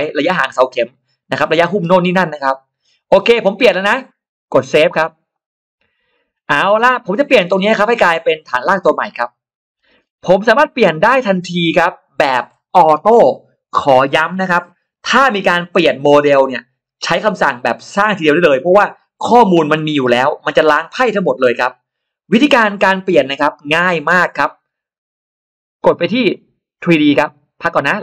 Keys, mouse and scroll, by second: 5.2 click, 6.8 middle click, 7.2-7.5 scroll up 1, 9.5 scroll down 1, 10.1 middle click, 10.1 scroll down 1, 10.9-11.2 scroll up 1, 11.4 scroll up 1, 26.6 click, 27.5 click.